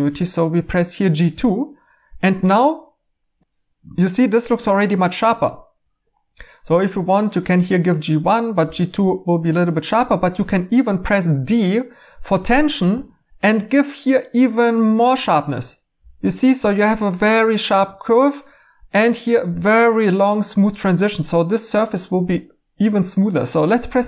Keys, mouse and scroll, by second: 12.9 d.